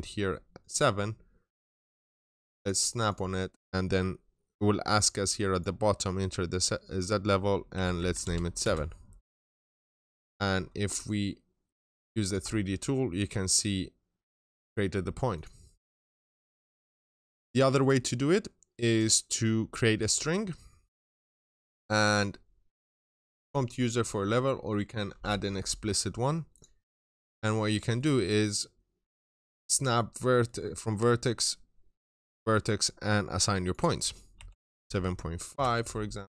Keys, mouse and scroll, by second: 1.6 right click, 2.4 click, 7.6-8.0 typing, 9.5 right click, 9.5 typing, 9.9 scroll down 1, 10.9 ctrl+shift+click, 12.3-12.9 scroll up 1, 15.2 click, 15.5 right click, 16.2 click, 16.4 double click, 16.8 right click, 17.6 click, 26.9-27.3 scroll up 1, 27.3 middle click, 27.8 right click, 28.9 click, 30.0 middle click, 34.4-35.3 typing, 35.7 Return.